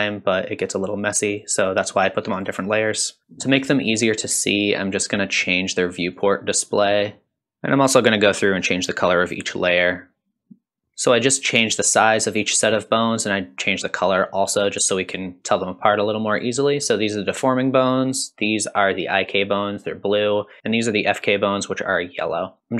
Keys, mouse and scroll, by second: 1.3 click, 1.9 click, 2.4 click, 3.2 shift+click, 3.2 scroll up 2, 3.6 shift+click, 3.7 click, 3.9 click, 4.5 click, 4.9 shift+click, 5.0 a, 5.1 a, 5.2 click, 5.5 click, 5.8 click, 6.0 click, 7.1 shift+click, 7.1 shift+click, 7.3 click, 7.4 scroll down 2, 7.4 alt+click, 7.8 scroll up 2, 8.0 Tab, 8.3 click, 8.6 ctrl+shift+s, 9.1 click, 9.2 ctrl+alt+s, 9.7 click, 10.1 ctrl+alt+s, 10.5 click, 10.7 Tab, 10.7 click, 10.8 KP_3, 14.3 click, 17.8 click, 20.2 click.